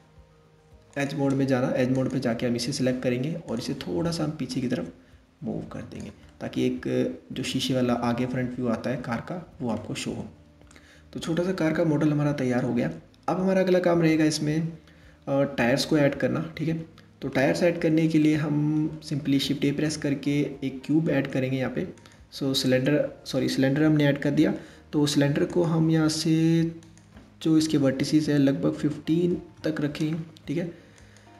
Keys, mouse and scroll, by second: 0.5 click, 1.6 click, 3.1-4.2 drag, 5.9-8.9 middle drag, 9.4-13.3 middle drag, 19.3 shift+a, 25.1-29.6 drag, 30.6-31.3 drag.